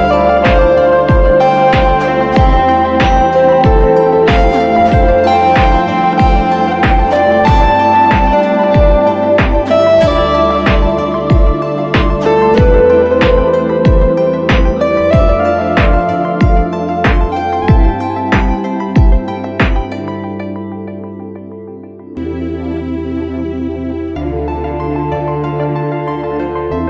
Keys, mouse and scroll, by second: 7.3 right click, 9.5-10.7 typing, 12.9 typing, 19.4 typing, 22.0-22.7 typing.